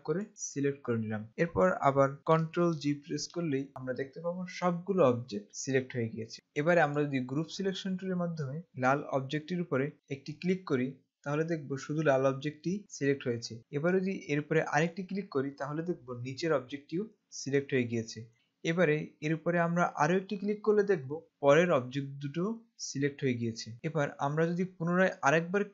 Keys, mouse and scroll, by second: 2.7 ctrl+Num_Lock, 3.4 ctrl+g, 6.3 click, 6.5 right click, 7.0 click, 10.7 click, 15.1 click, 20.3 click.